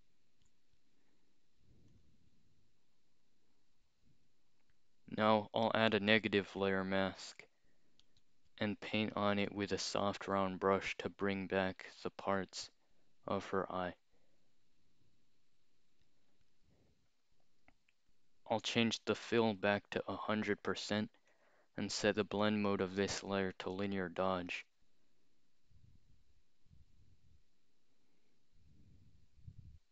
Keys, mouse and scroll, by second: 1.9 click, 8.0 alt+click, 9.5 click, 11.8-16.0 drag, 18.5 click, 19.6 click, 21.3 click, 23.7 click, 29.6-29.9 scroll up 2.